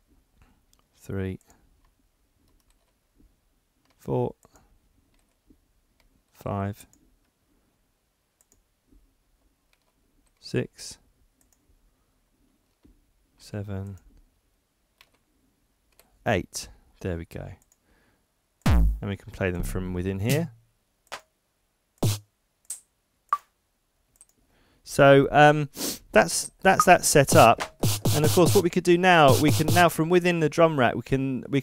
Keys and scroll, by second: 2.7 super+r, 9.7 super+r, 12.7 super+r.